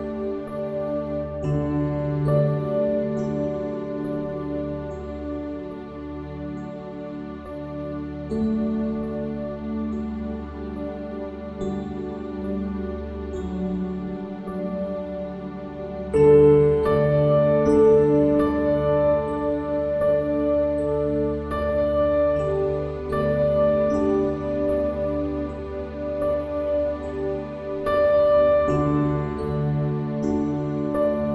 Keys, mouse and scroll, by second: 0.3 s, 2.5 r, 5.9 s, 9.1-10.9 drag, 11.9-13.8 drag, 15.7-16.7 middle drag, 16.6 KP_1, 20.5-22.7 drag, 23.1 s, 26.1 Tab, 29.9-31.3 drag.